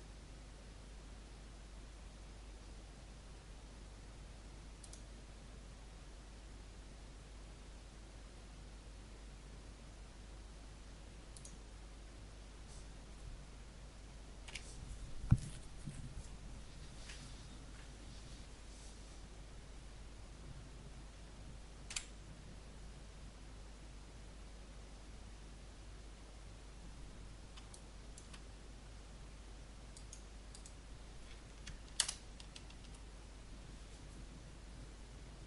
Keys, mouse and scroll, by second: 4.8 click, 11.3 click, 14.4 F12, 21.8 Escape, 27.7 alt+click, 28.5-29.7 scroll down 1, 29.9-31.5 right drag, 31.9 KP_0.